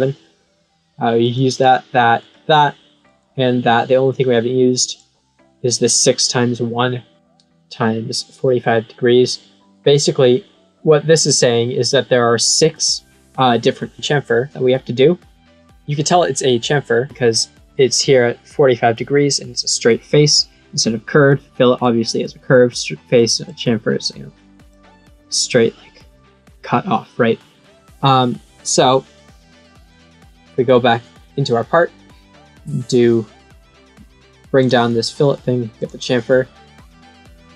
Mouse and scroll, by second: 1.2 click, 1.5 click, 2.1 click, 3.0 click, 4.0 click, 21.8 click, 23.4-24.6 drag, 29.8 click, 31.2 middle click, 34.5 click, 35.7 click.